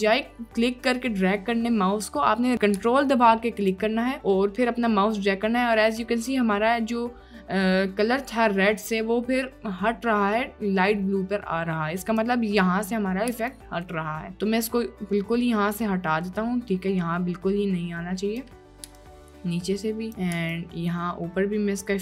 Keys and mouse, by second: 3.7 ctrl+click, 13.6 ctrl+drag, 20.1 click, 20.7 ctrl+click.